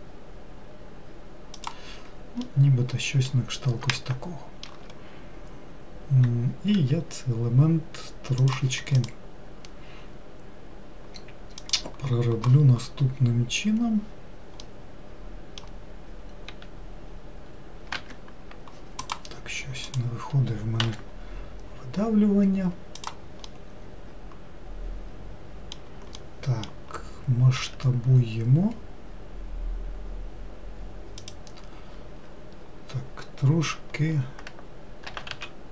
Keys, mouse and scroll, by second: 2.7-7.0 middle drag, 7.0 e, 14.9-16.7 middle drag, 16.7 w, 18.2 Escape, 19.3 click, 20.1 click, 21.1 e, 23.7-27.8 middle drag, 27.8 s, 35.3 g.